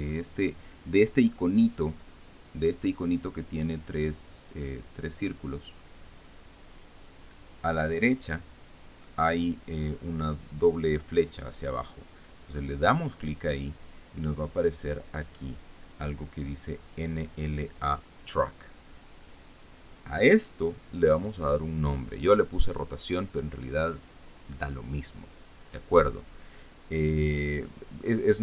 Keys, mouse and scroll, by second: 2.6-3.0 scroll up 2.